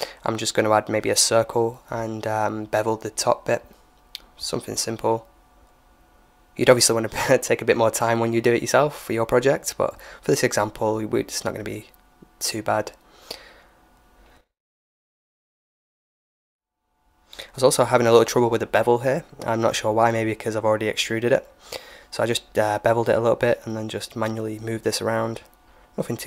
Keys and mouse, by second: 0.3 Tab, 0.6 middle click, 1.2 shift+a, 2.8 middle click, 3.2 s, 3.8-4.8 middle drag, 4.4 s, 5.4 click, 6.5 click, 6.5 s, 6.7 right click, 6.8 Tab, 7.3 click, 7.7 o, 8.0 click, 9.2-12.7 typing, 10.7 ctrl+z, 10.9 middle click, 12.9 middle click, 13.4 click, 13.8 middle click, 13.8 right click, 14.4 ctrl+b, 16.0 ctrl+b, 20.9 middle click, 21.4 ctrl+z, 21.8 ctrl+b, 22.9 right click, 23.6 s, 24.4 click, 24.6-26.2 middle drag, 24.6 Tab.